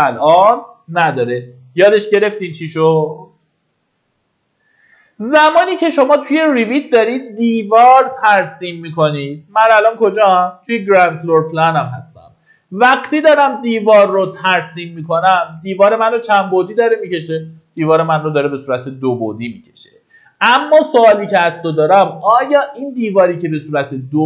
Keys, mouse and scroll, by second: 0.6 Escape, 5.7-24.2 drag.